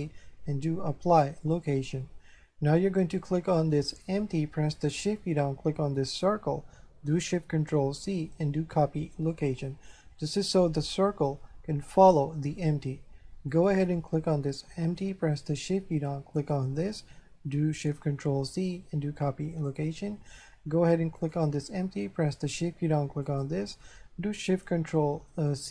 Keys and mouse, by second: 1.5 click, 3.9 right click, 6.2 shift+right click, 8.1 ctrl+shift+c, 9.3 click, 13.5 right click, 16.4 shift+right click, 18.4 ctrl+shift+c, 19.5 click, 21.2 right click, 23.3 shift+right click, 25.5 ctrl+shift+c.